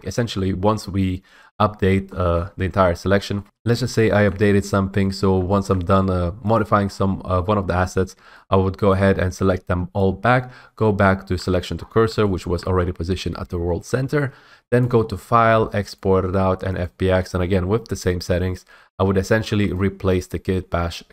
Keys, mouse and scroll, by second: 0.0 scroll, 2.0 middle click, 2.0 middle click, 2.5 middle click, 3.2 middle click, 3.2 middle click, 3.4 scroll, 4.4-4.8 scroll, 5.8-6.2 scroll, 6.7 click, 7.0 scroll, 7.8 scroll, 9.1 click, 9.9 click, 10.2 s, 10.7-11.5 s, 11.9 scroll, 12.7-13.5 scroll, 15.0 click, 15.6 click, 17.0 click, 19.9 click.